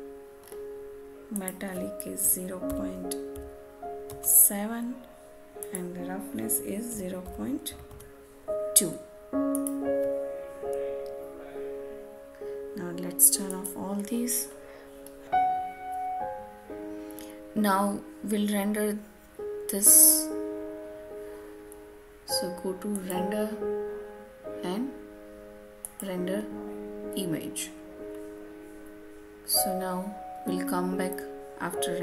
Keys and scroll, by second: 4.0 Return.